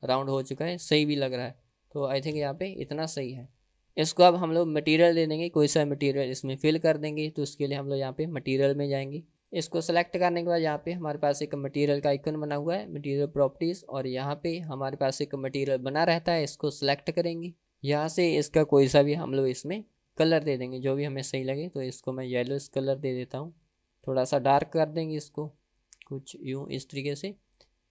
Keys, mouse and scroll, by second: 1.5 ctrl+z, 1.9 middle click, 2.6 ctrl+z, 2.8 click, 3.4 middle click, 3.7 middle drag, 3.9-4.3 scroll down 1, 4.4-5.0 middle drag, 9.3 scroll down 1, 9.5 drag, 12.5 click, 14.7-17.7 drag, 19.4 click, 27.4 click.